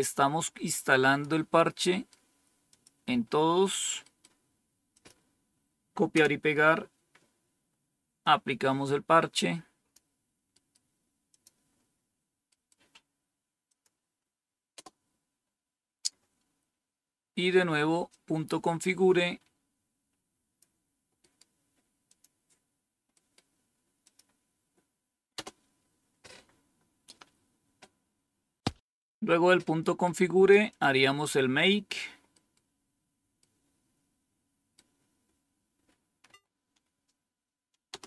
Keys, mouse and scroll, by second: 1.9 right click, 2.6 click, 4.8 click, 6.0 Return, 8.1-9.9 drag, 10.6 right click, 11.2 click, 13.6 click, 14.6 Return, 16.3-18.0 scroll down 1, 18.0-20.5 drag, 21.9 click, 23.9 click, 25.2 Return, 28.1-28.6 scroll down 1, 30.6 click, 36.1 Right, 37.8 Return.